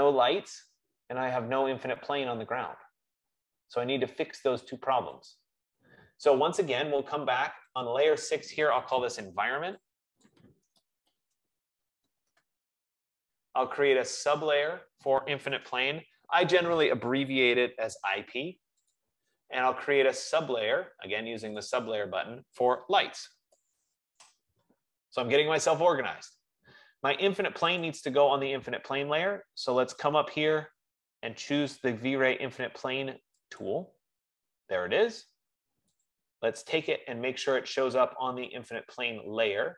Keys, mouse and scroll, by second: 5.8 click, 8.5 click, 9.5 click, 11.2-13.9 typing, 11.5 click, 15.4 click, 16.2-16.9 typing, 17.4 F15, 19.4 click, 22.4 click, 23.2-25.3 typing, 28.2 click, 33.8 click, 36.5 click, 39.0 right click.